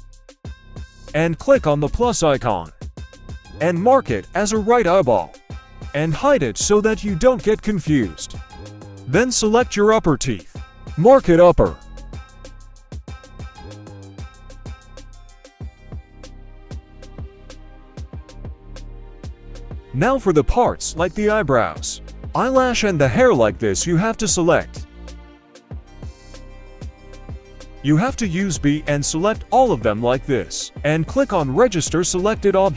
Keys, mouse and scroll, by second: 0.9 click, 4.4 click, 5.3 h, 6.2-6.8 scroll down 1, 6.8 right click, 6.8 scroll down 1, 7.2 scroll up 1, 8.1 click, 8.7-9.3 scroll down 1, 9.7 click, 10.6 right click, 10.6 h, 11.5-12.6 drag, 13.1 h, 13.9 right click, 15.0-15.6 drag, 16.4 click, 17.6 h, 18.7 shift+middle drag, 19.1-19.5 scroll down 2, 19.4 right click, 20.2 g, 21.7 right click, 22.0 g, 22.6-22.9 middle drag, 23.2 right click, 23.6 right click, 23.9 g, 24.6-25.3 middle drag, 25.6 middle click, 27.2 b, 28.4 g.